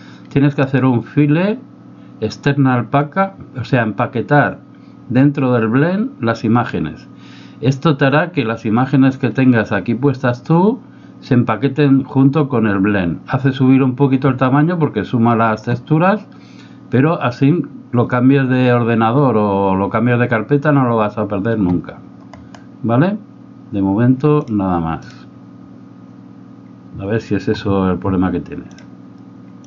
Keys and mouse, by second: 0.7-9.3 drag.